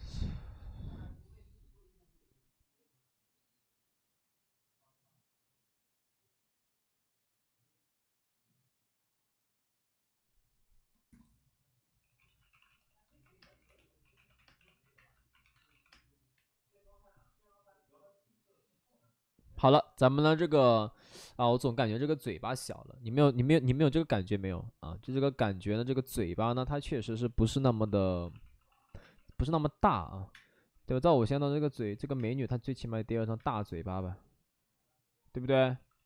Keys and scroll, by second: 27.8-30.3 typing, 31.9 ctrl+z, 32.1 space, 33.4 space, 35.7 d, 35.9 d.